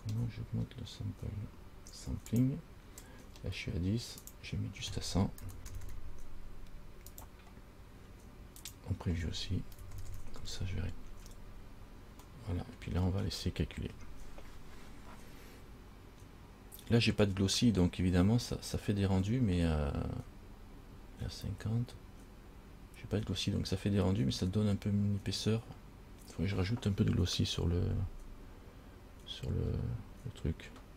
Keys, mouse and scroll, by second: 0.0-0.5 scroll down 1, 0.5-1.5 scroll down 3, 1.5-2.5 scroll down 1, 2.5 click, 2.5-3.4 scroll down 1, 3.4-4.4 scroll down 1, 4.4 click, 6.0 KP_0, 8.8 click, 10.2 KP_0, 12.7 middle click, 29.8 scroll down 2.